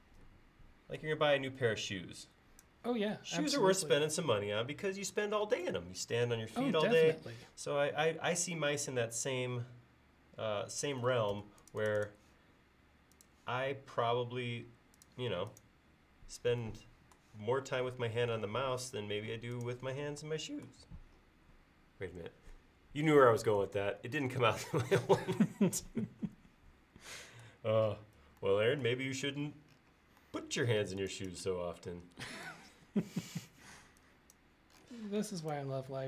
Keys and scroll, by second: 11.4 space, 31.8 e, 35.3 space.